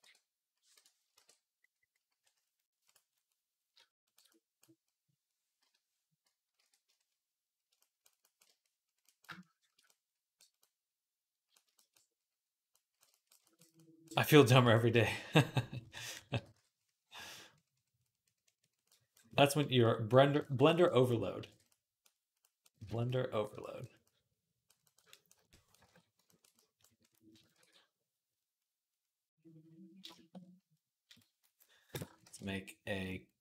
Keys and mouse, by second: 0.8-8.9 ctrl+drag, 1.0 ctrl+t, 1.0 ctrl+r, 6.4 i, 6.4 d, 10.6-11.7 drag, 10.6-15.4 middle drag, 10.6-11.7 right drag, 15.8 ], 16.0 ], 16.3 ], 16.4 ], 21.3 alt+q, 22.7 alt+q, 23.3-25.4 ctrl+drag, 23.3-25.4 ctrl+middle drag, 23.3-25.4 ctrl+right drag, 25.7 ctrl+Tab, 26.6 click, 26.6 middle click, 26.6 right click, 27.4 ctrl+s, 27.4-29.9 right drag, 29.9 shift+click, 30.0-33.4 right drag, 30.9 click, 32.0 shift+a.